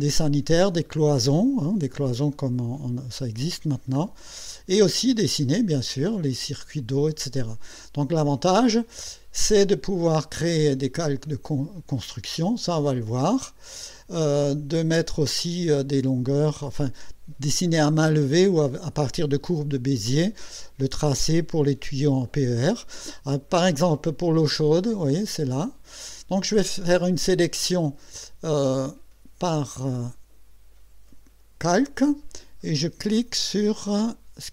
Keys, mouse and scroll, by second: 0.6-1.0 scroll up 2, 2.3 scroll down 2, 3.6-4.5 scroll down 4, 4.8 scroll down 2, 5.4 middle click, 11.0 click, 11.9 click, 12.4 click, 13.6 click, 25.1 click, 25.6 click, 29.7 click.